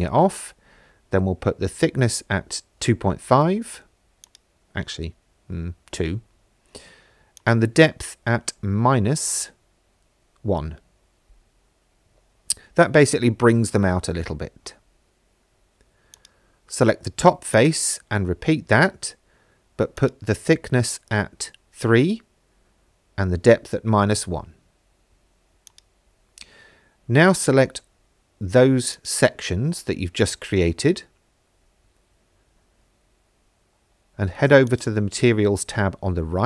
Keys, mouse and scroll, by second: 4.2-5.4 drag, 7.4-9.9 drag, 11.9 middle click, 16.2 click, 17.6 click, 20.0-22.8 drag, 25.7 shift+click, 27.4 middle click, 28.9 shift+click, 29.8 middle click, 31.7 shift+middle click, 34.7 click.